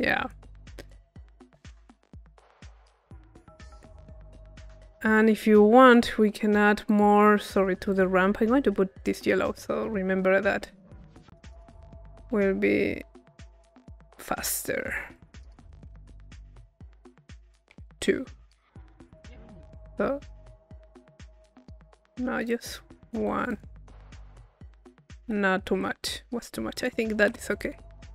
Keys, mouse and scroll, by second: 2.4-4.1 drag, 4.1 middle click, 4.9-6.7 drag, 6.9 click, 7.9 click, 9.0 click, 11.1 click, 12.2-14.2 drag, 15.2 click, 16.5-19.0 drag, 21.5-23.2 drag, 23.5 click, 24.5 middle click, 26.8-28.1 drag, 27.6 p.